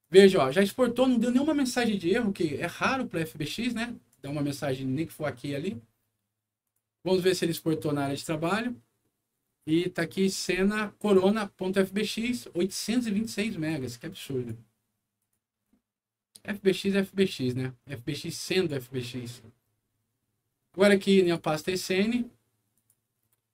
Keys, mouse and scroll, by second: 0.0 click, 4.0 click, 6.6 click, 8.0 click, 11.0 click, 13.6 click, 15.1 click, 16.5 click, 17.8 click, 19.8 scroll down 1, 20.3 scroll down 1, 21.2 click, 21.4 click, 22.7 click.